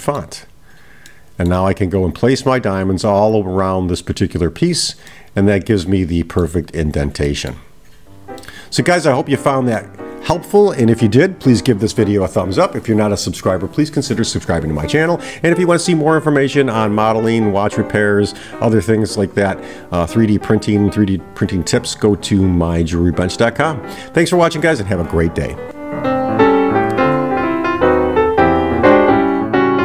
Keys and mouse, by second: 1.1-1.6 middle drag, 5.1-6.6 middle drag, 7.3-7.6 middle drag, 8.4-10.2 middle drag.